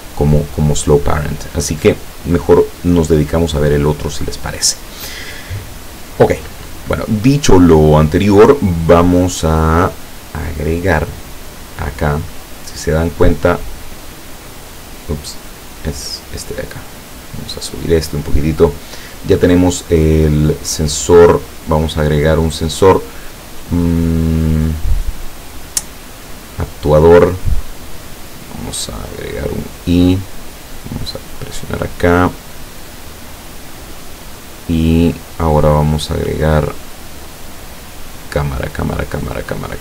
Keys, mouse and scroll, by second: 9.1 right click, 9.7 right click, 11.4-12.7 drag, 14.1 click, 17.2-18.9 drag, 21.7 click, 26.8 click, 28.3 click, 29.0 click, 30.8 click, 33.7 click, 34.3 click, 35.3-36.1 drag, 36.5 click.